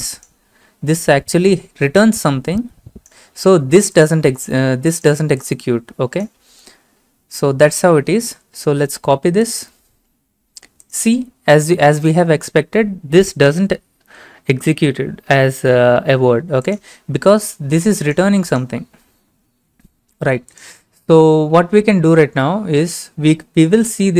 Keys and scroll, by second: 7.8 ctrl+a, 8.2 ctrl+c, 12.1 ctrl+v.